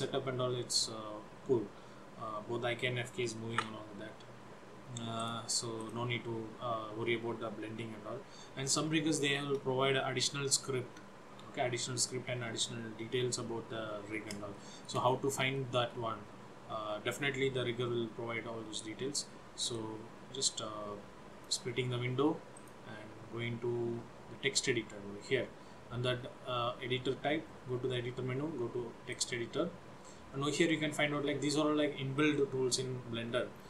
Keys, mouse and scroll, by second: 4.0 ctrl+z, 5.4 click, 5.9 click, 8.7 scroll down 2, 9.3 shift+middle click, 14.7 shift+middle click, 15.2-15.6 scroll down 2, 15.7 shift+middle click, 19.9 click, 22.7 click.